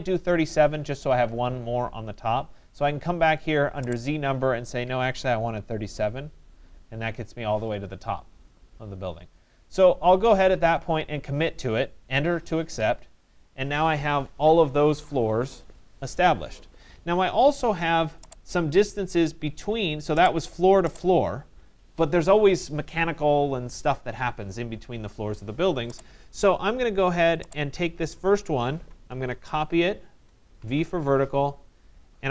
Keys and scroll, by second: 4.5 3, 5.2 7, 5.9 Return, 12.3 Return, 29.7 Return.